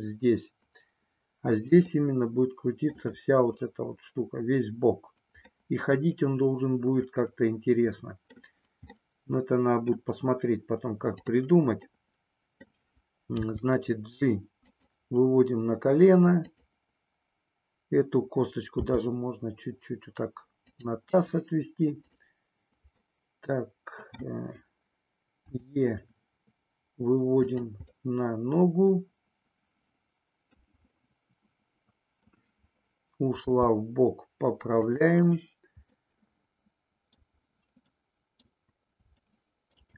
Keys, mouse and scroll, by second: 1.9-2.9 middle drag, 5.6-8.3 middle drag, 8.3-8.9 scroll down 1, 8.9 scroll down 1, 9.0-10.1 middle drag, 11.8 middle click, 13.3 g, 18.8 g, 20.7 click, 21.9 click, 22.9-24.2 middle drag, 25.4 e, 27.9-30.7 middle drag, 30.9-32.4 middle drag, 33.4 g, 34.8 click, 36.1-37.3 middle drag, 37.9 middle click, 39.2 shift+middle click.